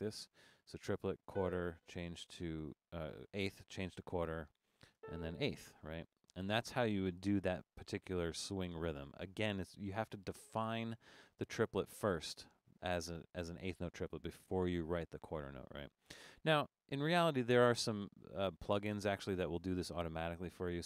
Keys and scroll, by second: 0.0 alt+3, 1.3 4, 4.3 Down, 5.0 4.